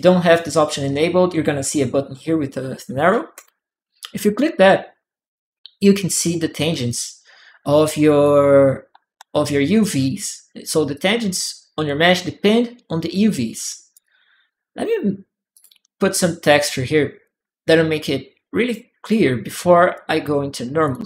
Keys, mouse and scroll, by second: 3.1 click, 6.7-8.4 right drag, 7.4 click, 8.9 e, 9.8 q, 10.3 click, 10.8 middle click, 10.9 click, 12.2-13.3 drag, 12.8 right click, 13.8 click, 15.3 click, 16.7 click, 16.7 right click, 17.8 right click, 19.5 right click, 20.6 alt+click.